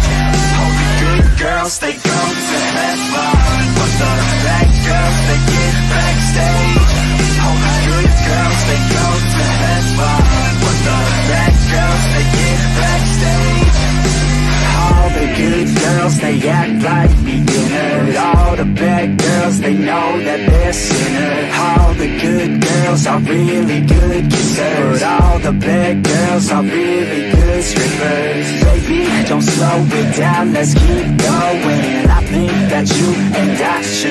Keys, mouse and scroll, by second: 0.0 n, 7.9 click, 9.1-10.9 drag, 11.8 click, 13.5 click, 15.4-20.8 drag, 26.3 click, 28.6 click, 29.9 click.